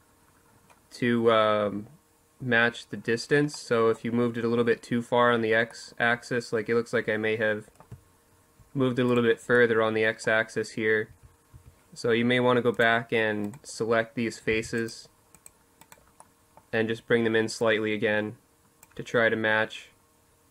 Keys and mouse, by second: 2.3-6.3 middle drag, 7.8-10.2 right drag, 9.8 z, 10.2 z, 11.4 click, 12.2-13.2 middle drag, 13.2 c, 16.3 click, 16.7-20.5 drag.